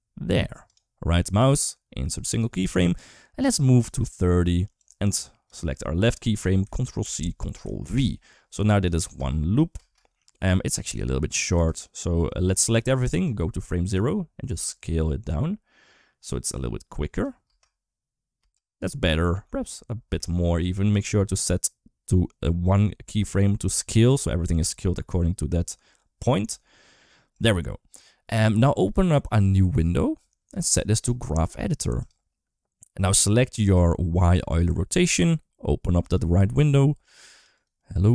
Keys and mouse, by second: 1.4 right click, 3.7 click, 4.6-5.3 drag, 6.8 ctrl+c, 7.7 ctrl+v, 8.5 click, 8.8 space, 9.6 space, 10.8-11.5 drag, 13.1 click, 14.3 s, 17.3 space, 18.2 space, 19.2 s, 20.7 click, 23.5 s, 26.3 s, 29.0-30.5 drag, 30.9-32.0 drag, 33.5 click, 34.2 click, 35.8 click, 36.7 click, 37.1 click, 37.3 click, 37.6 click.